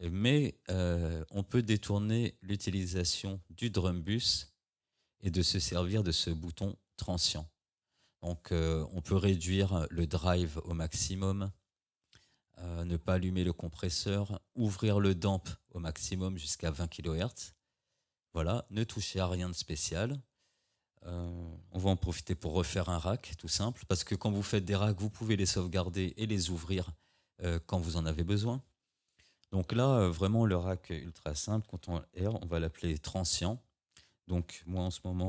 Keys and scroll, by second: 23.9 ctrl+g, 31.7 ctrl+r.